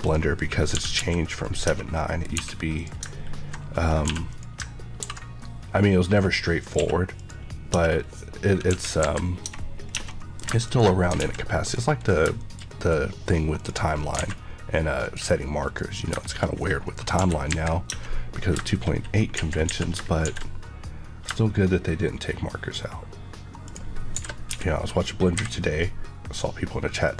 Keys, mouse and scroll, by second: 7.7 Tab, 7.8 scroll down 1, 8.6 KP_1, 8.9 KP_3, 9.4 Tab, 9.7 scroll down 1, 10.0 middle click, 10.6 click, 11.1 alt+x, 11.6 scroll down 1, 12.3 middle click, 13.5 click, 13.8 scroll up 1, 14.1 a, 15.0 click, 16.1 middle click, 16.4 scroll up 1, 17.1 KP_1, 17.4 KP_3, 17.8 Tab, 18.3 scroll up 1, 19.3-20.2 typing, 23.6 click, 24.1-25.3 typing.